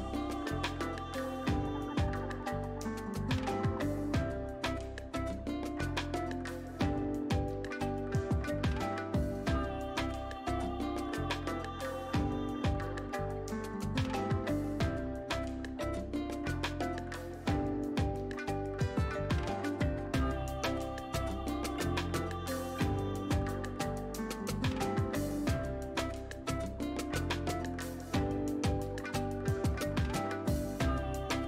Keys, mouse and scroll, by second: 7.7 click, 11.9 right click, 13.2 click, 20.0 scroll up 1, 21.3-22.6 shift+drag, 24.3 shift+click, 29.4 scroll down 1.